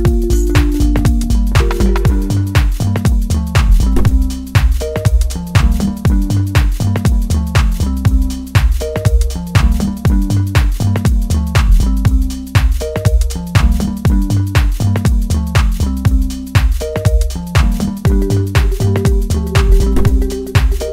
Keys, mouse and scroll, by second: 0.9-5.7 drag, 5.7-12.4 middle drag, 12.7-15.2 drag, 15.2-18.4 middle drag, 18.4-19.0 scroll up 1, 19.0 scroll down 1, 19.3-20.9 shift+middle drag.